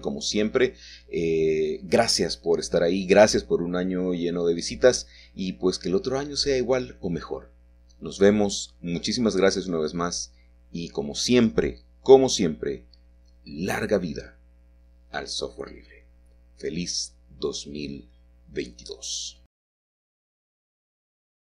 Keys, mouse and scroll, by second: 3.0-4.0 middle drag, 3.0-4.0 scroll up 2, 5.1-6.2 drag, 8.5 middle click, 8.5-8.9 typing, 10.0-12.5 middle drag, 10.0-11.1 scroll up 1, 11.8-12.5 shift+scroll up 1, 20.5-21.5 middle drag, 20.5-21.5 scroll down 1.